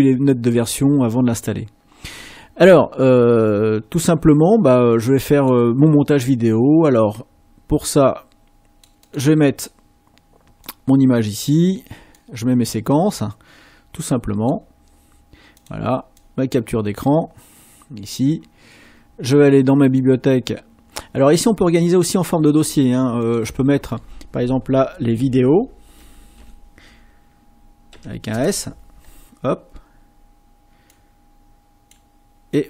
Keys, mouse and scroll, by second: 24.7-26.3 typing, 27.9 s, 28.3 Return.